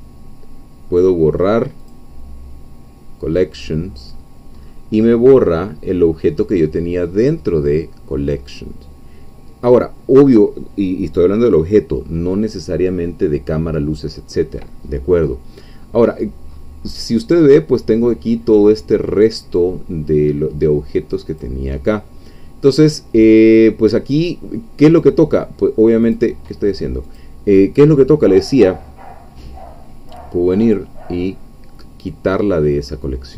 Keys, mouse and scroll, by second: 1.8-2.8 drag, 3.3-3.7 scroll up 1, 3.9-4.4 scroll up 2, 4.6 scroll up 1, 5.4-6.4 scroll down 2, 6.4-7.7 scroll up 2, 14.9-15.2 scroll down 1, 16.1-17.3 scroll up 1, 21.3 click, 22.8 click, 24.9 click, 26.1 click, 27.1 click, 30.7 click.